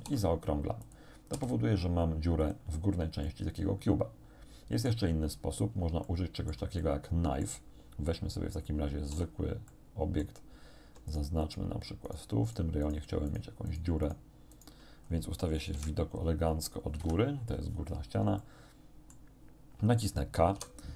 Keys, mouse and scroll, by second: 0.0 alt+shift+s, 0.9 click, 1.4 s, 2.4 click, 3.3-5.1 drag, 5.5 scroll down 1, 6.1 shift+click, 7.0 shift+click, 9.2 a, 9.7 click, 11.2 shift+click, 12.1 shift+click, 12.5 shift+click, 12.9 shift+click, 13.0 shift+right click, 13.3 shift+right click, 14.6 shift+right click, 15.1 shift+scroll up 2, 15.8 KP_1, 17.0 KP_7, 18.4 shift+middle click, 20.6 k.